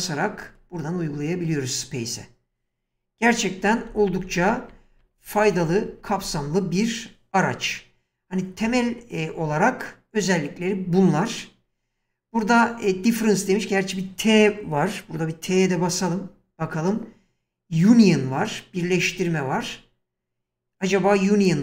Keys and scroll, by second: 3.6 ctrl+z, 15.9 t, 18.9 t.